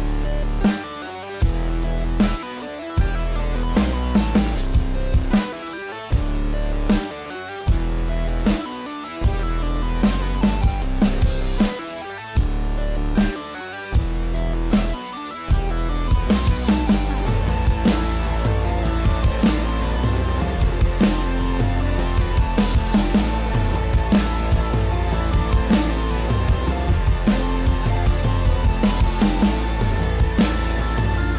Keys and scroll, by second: 2.9 ctrl+-, 3.2 ctrl+=, 3.4 ctrl+-, 13.8 ctrl+=, 19.6 ctrl+=, 19.8 ctrl+-, 21.2 ctrl+s, 22.6 ctrl+=, 23.2 space, 23.8 space, 24.3 ctrl+-, 24.5 ctrl+-.